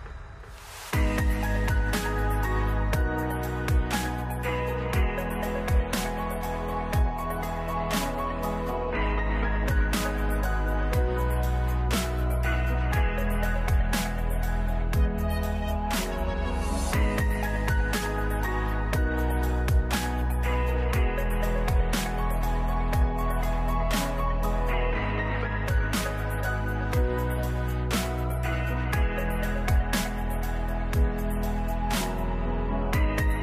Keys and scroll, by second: 12.3 ctrl+s, 13.5 s, 14.6 1, 15.1 2, 18.4 0, 20.9 r, 32.0 ctrl+s, 33.2 s.